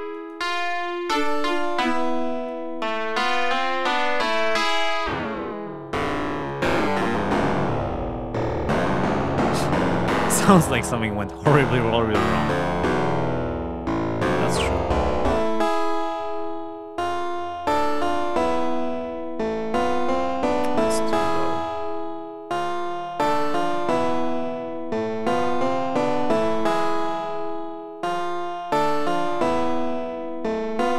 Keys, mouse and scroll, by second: 0.1 click, 0.7-2.6 drag, 3.1-4.1 drag, 4.3-9.4 drag, 10.4-11.2 scroll down 4, 11.3-12.3 scroll up 6, 14.4-20.5 drag, 21.7-23.8 scroll up 10, 24.3 scroll up 2, 25.1-25.6 scroll up 4, 26.0-26.4 scroll up 3, 27.2 scroll up 2, 28.1 scroll up 2, 29.2-29.6 scroll up 2, 29.9-30.3 scroll up 2, 30.4-30.7 scroll up 2.